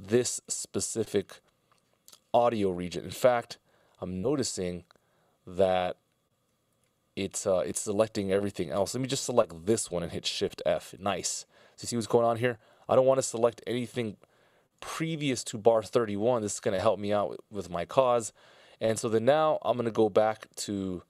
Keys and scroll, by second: 3.5 super+z, 4.4 super+z, 5.2 super+z, 6.0 super+z, 10.4 shift+f.